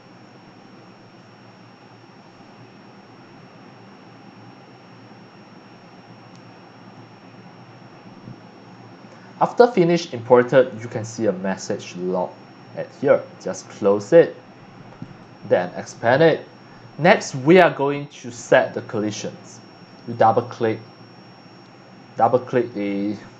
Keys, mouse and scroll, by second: 13.9 click, 15.0 click, 15.9 click, 16.9 middle drag, 20.1 click, 20.2 click, 22.2-22.9 scroll down 3.